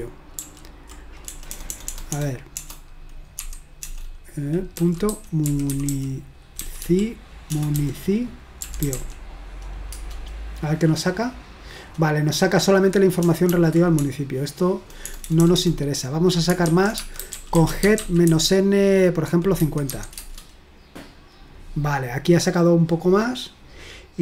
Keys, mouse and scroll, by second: 0.4 ctrl+p, 1.3-3.4 typing, 4.5-9.4 typing, 10.0 Return, 13.6 ctrl+p, 14.0-15.1 BackSpace, 15.3 BackSpace, 15.4 BackSpace, 15.5 BackSpace, 16.7 Down, 16.7-19.9 typing, 20.2 Return, 22.6-23.3 scroll up 1, 23.6-24.1 scroll down 1.